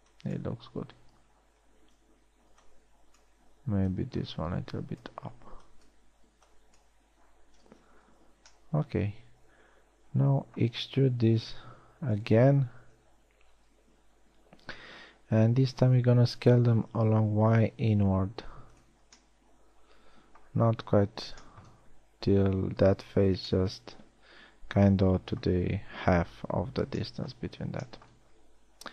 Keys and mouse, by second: 0.3 b, 2.7 a, 3.1 b, 6.0 b, 6.9 b, 8.7 z, 12.5 e, 13.7 KP_1, 14.1 KP_3, 16.4 s, 25.8-27.5 middle drag.